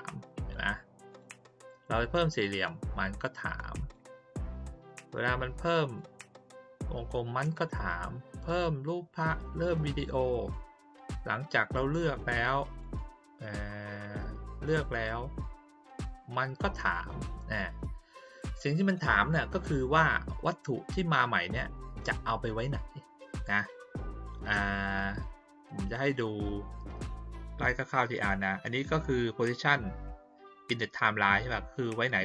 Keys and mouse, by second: 1.1 click, 2.1 click, 3.2-3.9 drag, 4.5 click, 5.8 click, 7.5 click, 9.5 click, 12.1-12.8 drag, 14.0 click, 14.9 click, 15.9 click, 17.2-18.9 drag.